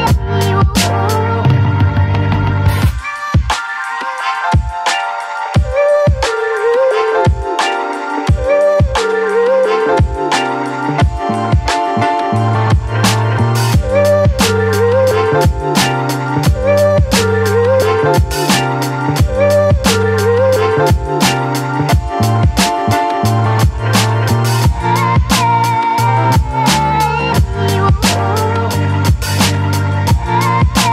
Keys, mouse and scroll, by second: 4.8-7.4 drag, 7.4-11.1 drag, 11.3 Left, 13.3 click, 14.8-17.0 drag, 20.6 click, 27.4 click, 27.5-30.9 shift+drag.